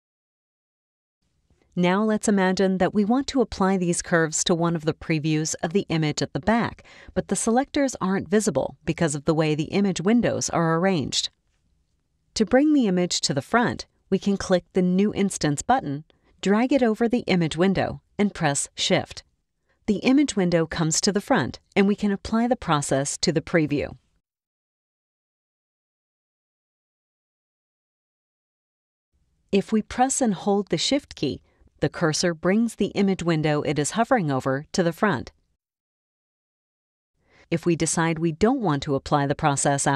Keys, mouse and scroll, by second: 14.3 click, 14.5 click, 14.9-25.1 drag, 27.1 click, 30.1-39.9 drag.